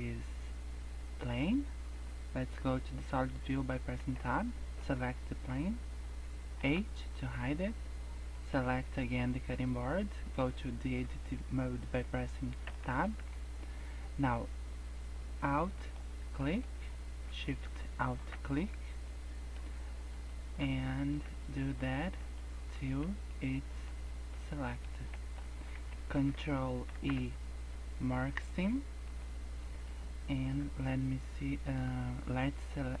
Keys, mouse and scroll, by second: 0.5 scroll down 3, 1.4-2.0 scroll up 4, 3.9 Tab, 4.7 click, 6.5 h, 7.1 scroll up 1, 8.3 click, 12.6 Tab, 13.1 scroll up 2, 15.7 alt+click, 16.3 middle click, 17.9 alt+shift+click, 18.5 middle click, 20.0 alt+shift+click, 20.6 middle click, 21.7 alt+shift+click, 22.2 middle click, 22.9 middle click, 23.4 middle click, 24.0 middle click, 24.5 middle click, 25.0 shift+middle click, 26.8 ctrl+e, 29.6 middle click, 29.9-31.5 scroll down 4, 31.5 KP_0, 32.2 scroll up 2, 32.7-33.0 scroll down 2.